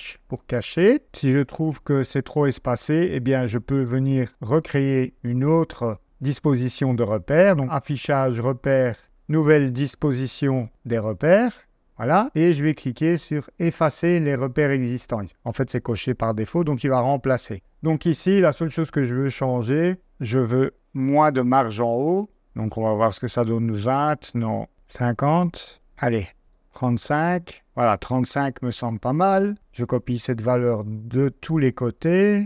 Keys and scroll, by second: 22.5 0, 24.7-27.2 typing, 29.5 super+c, 31.2 super+v.